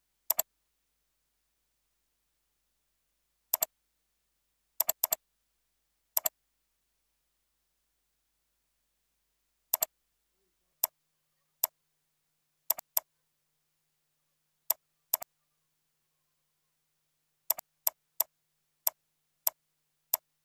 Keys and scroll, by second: 12.4 ctrl+a, 13.5 ctrl+5, 14.2 ctrl+a, 14.4 ctrl+5, 15.9 ctrl+Down, 16.7 ctrl+Right, 18.9 ctrl+Right.